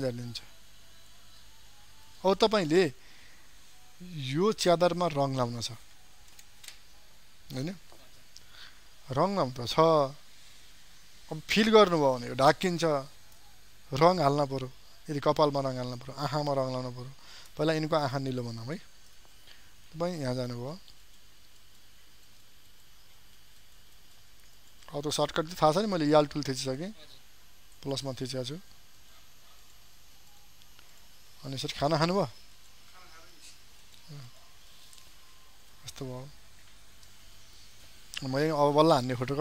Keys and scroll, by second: 17.8 ctrl+space.